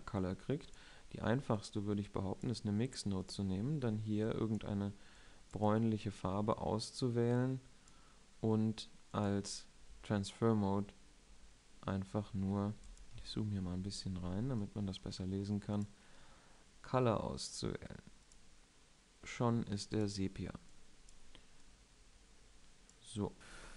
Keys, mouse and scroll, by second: 19.4-20.1 drag, 22.7 middle click.